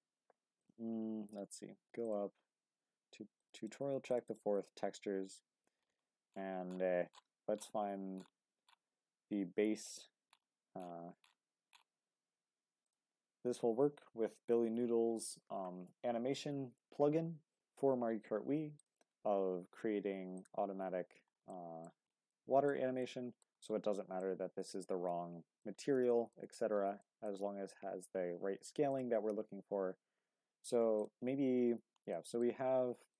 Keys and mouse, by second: 18.7 click, 19.4 g, 20.4 click, 21.5 drag, 21.7 middle click, 22.3-22.7 drag, 22.8 middle click, 23.0-23.4 drag, 24.2-25.6 drag, 26.1 shift+click, 27.0 shift+middle click, 32.1 middle click.